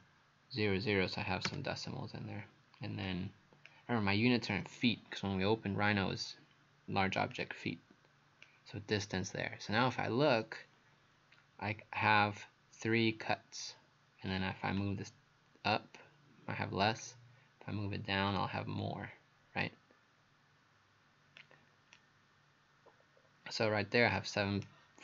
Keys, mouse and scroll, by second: 1.5 KP_Enter, 3.1 click, 22.0 right click.